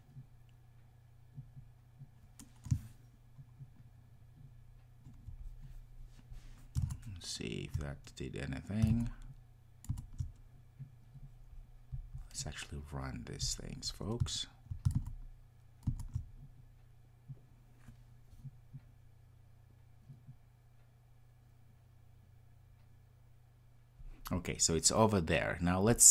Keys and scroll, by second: 13.4 ctrl+r.